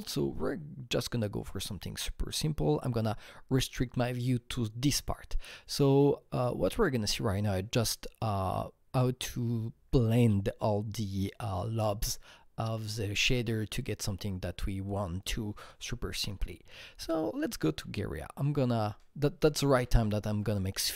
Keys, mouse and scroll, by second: 4.4 Right, 17.8 alt+Tab, 19.2 alt+Tab, 19.4 alt+Tab, 19.5 alt+Tab, 19.7 alt+Tab, 19.9 alt+Tab.